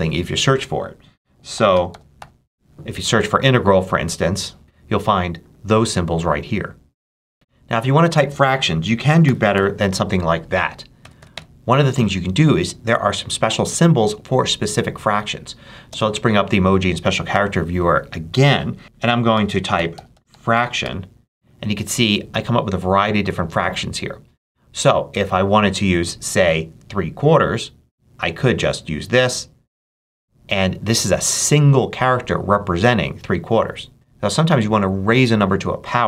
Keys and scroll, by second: 1.2-2.3 typing, 4.6 BackSpace, 12.3 BackSpace, 15.7 ctrl+super+space, 19.2-21.2 typing.